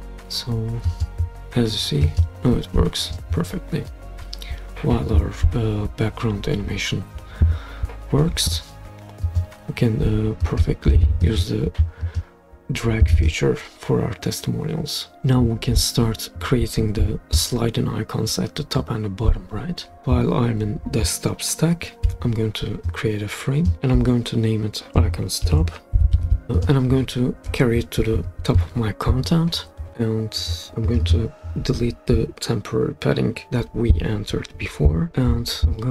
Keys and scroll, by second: 22.1 f, 25.4 Caps_Lock, 25.7-26.6 typing, 28.1 Page_Up, 33.3 Return.